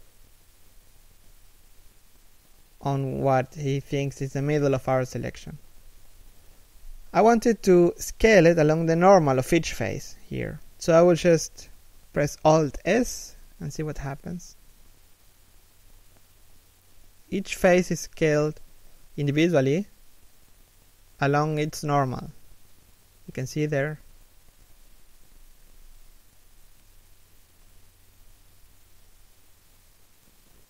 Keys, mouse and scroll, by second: 1.7 scroll up 1, 2.2 s, 8.2 middle click, 9.2 3, 9.9 KP_1, 11.3 alt+s, 15.2 z, 15.5 alt+s, 17.7 scroll down 1, 17.9 middle click, 19.3 KP_3, 19.7 KP_1, 20.2 scroll up 1, 20.4 alt+s, 22.3 right click, 22.7 alt+s, 27.2 z, 27.9 middle click, 28.5 z, 28.8 alt+s.